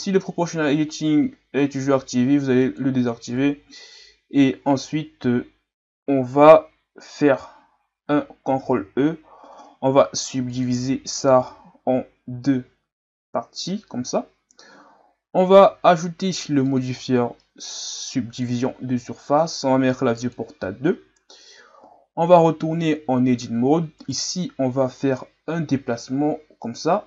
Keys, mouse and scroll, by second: 2.6 click, 4.3-4.8 scroll down 1, 8.8 ctrl+e, 15.5 Tab, 18.4-19.7 drag, 20.2-21.3 drag, 21.3-21.8 ctrl+scroll up 2, 21.8 Tab, 22.5-23.1 ctrl+scroll up 1, 23.1-23.4 ctrl+scroll up 1, 24.0 right click.